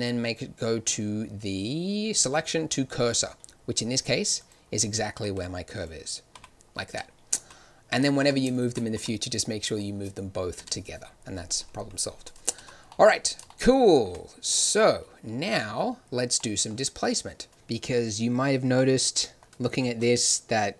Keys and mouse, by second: 3.9-5.2 drag, 5.2 z, 6.3 g, 7.3 z, 8.1 z, 8.9 g, 12.5 z, 20.4 shift+z.